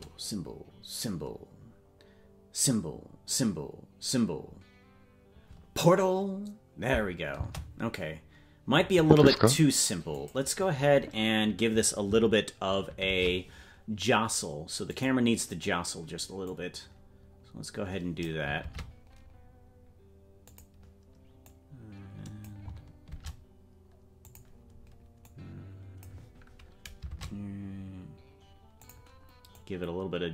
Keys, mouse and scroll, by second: 7.3 space, 10.1 click, 13.0 shift+`, 16.4-18.3 drag, 18.6 shift+`, 21.4-22.5 drag, 23.0 shift+`, 25.2 click, 27.0 shift+`, 29.5-30.3 drag.